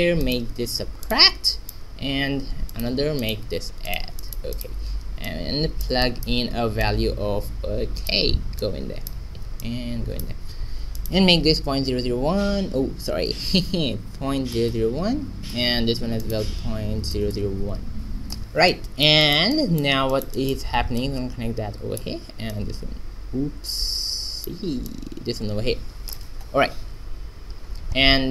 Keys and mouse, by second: 1.4-5.1 drag, 3.1 shift+d, 6.8-8.0 drag, 8.5 click, 12.0 KP_Decimal, 13.4 BackSpace, 14.6 KP_0, 16.1-18.1 drag, 17.3 KP_0, 18.4 click, 19.2-20.9 middle drag, 20.9-24.4 drag, 24.8-26.7 drag, 27.8 middle click.